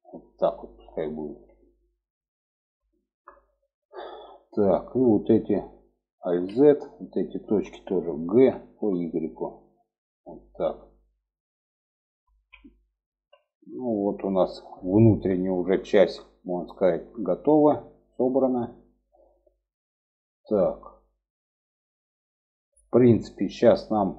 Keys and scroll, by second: 5.6 alt+z, 6.7 alt+z, 7.7 g, 11.6 alt+z, 12.4 alt+z.